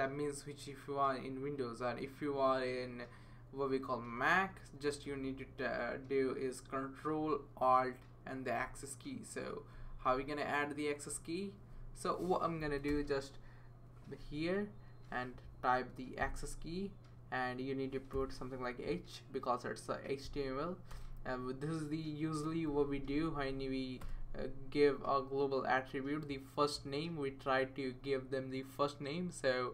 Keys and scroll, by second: 12.9 space, 18.1 h, 20.9 space, 22.7-23.2 Down, 23.1 Down, 23.4 Down, 24.0 Return.